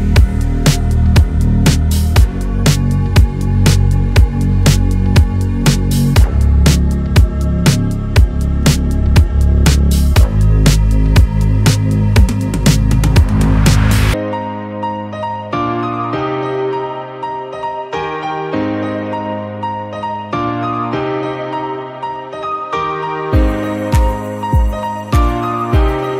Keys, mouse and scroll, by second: 0.4 click, 0.5 g, 1.5 g, 2.1 click, 2.2 g, 3.3 Tab, 3.4 scroll down 4, 3.5 middle click, 4.1-4.6 scroll up 1, 4.6 click, 4.7 click, 5.3 KP_1, 5.7 r, 6.3 r, 8.7 middle click, 9.3 s, 10.0 click, 10.7 scroll down 3, 10.8 middle click, 12.0-12.4 scroll up 5, 12.4 KP_3, 12.7 click, 12.9 Tab, 13.6 click, 14.2 right click, 14.8 click, 15.3 s, 15.8 f, 16.4 click, 16.8 g, 18.7 click, 18.9 g, 20.2 g, 22.3 Tab, 22.5 scroll down 1, 22.6 click, 22.7 middle click, 23.3 scroll down 1, 23.4-24.2 scroll up 3, 23.7 middle click, 24.2 shift+middle click, 25.0 click, 25.4 Tab, 25.6 scroll up 2, 25.8 scroll down 2, 26.1 scroll up 1.